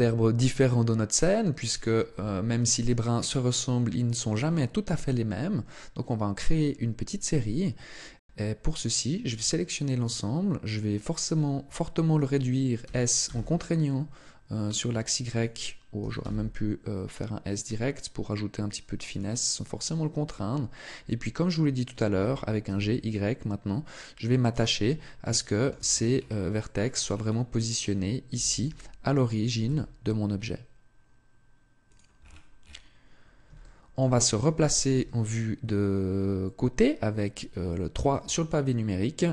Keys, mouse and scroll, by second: 2.0 Tab, 4.7 a, 9.1 a, 12.6 s, 15.2 click, 15.8 s, 19.0 click, 22.0 g, 24.3 click, 25.1 shift+middle click, 25.7-26.3 scroll up 8, 26.4 shift+middle click, 26.9 scroll up 2, 28.1 g, 31.7 click, 32.0 scroll down 1, 33.4 shift+middle click, 34.7 KP_3, 37.5 shift+middle click, 38.3-39.1 scroll up 1, 39.1 Tab, 39.1 scroll up 1.